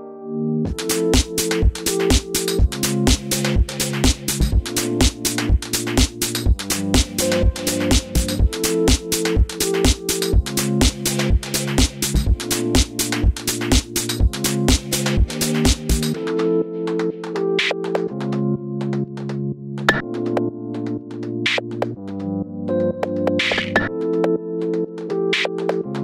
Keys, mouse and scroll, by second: 2.6 click, 3.4 shift+click, 3.6-10.1 middle drag, 4.6 o, 10.1 shift+click, 10.4 middle click, 11.1 shift+click, 11.3-14.0 middle drag, 12.1 s, 14.0 alt+click, 14.5 alt+shift+click, 14.8 s, 15.5 click, 15.6-20.5 middle drag, 16.6 scroll down 1, 18.6 1, 19.1 l, 20.4 s, 20.5 click, 20.6 middle click, 21.0 Tab, 21.6 shift+middle click, 21.9 scroll up 1, 22.1 shift+middle click, 22.4 scroll up 1, 22.6 shift+middle click, 22.9 shift+a, 25.3 click, 25.8-26.0 drag.